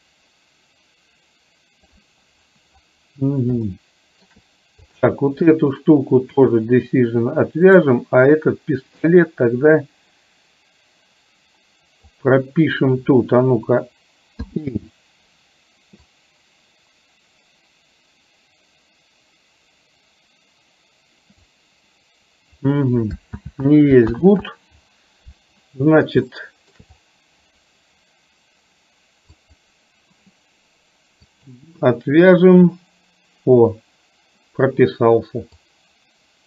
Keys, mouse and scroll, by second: 3.8 shift+middle click, 4.9 click, 9.2-12.2 drag, 14.6 i, 16.2-21.7 drag, 23.4 ctrl+z, 24.2 ctrl+z, 26.4-26.8 shift+middle drag, 29.6 click, 31.4 click, 35.7-36.4 drag.